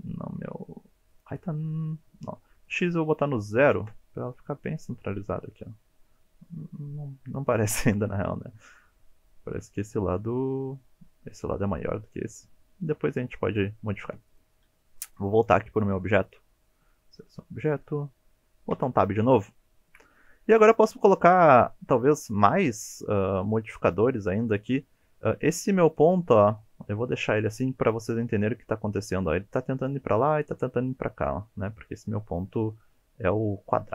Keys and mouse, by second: 1.2 click, 2.6-4.6 drag, 15.0 click, 15.8 middle drag, 16.6 middle drag, 17.7 KP_7, 18.7 Tab, 19.5-19.9 shift+drag, 21.4 ctrl+r, 25.0 1, 25.3 click, 26.1 g, 27.4 click, 28.0 ctrl+r.